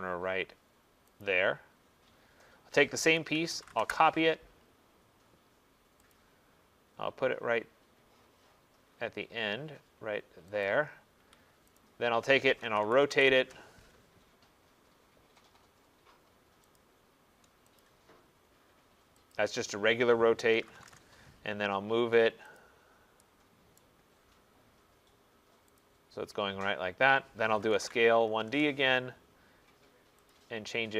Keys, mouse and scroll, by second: 1.3 click, 1.7 middle click, 1.8 middle click, 2.5 middle click, 3.5-5.4 typing, 4.8 middle click, 4.9 middle click, 6.2 click, 8.7 middle click, 10.7 click, 11.3 Escape, 11.8 click, 12.7-13.5 typing, 16.8 click, 17.9 click, 19.4 click, 20.6-21.0 typing, 22.6 click, 23.8 right click, 24.1 middle click, 25.8 click, 26.0 typing, 27.5-28.6 typing, 30.4 click.